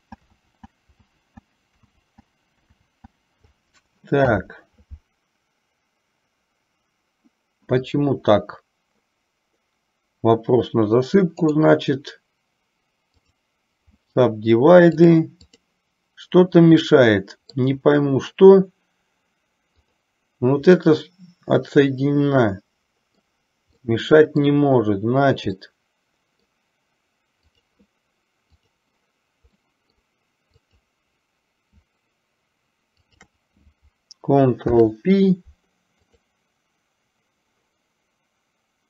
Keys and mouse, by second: 0.1 ctrl+z, 1.2 ctrl+z, 2.1 ctrl+z, 11.5-13.6 right drag, 15.0 click, 17.0-17.9 middle drag, 20.9-23.5 middle drag, 24.0-24.7 middle drag, 25.7-26.7 middle drag, 28.9 click, 29.7-30.2 middle drag, 30.6 click, 33.2 shift+click, 34.7 ctrl+p.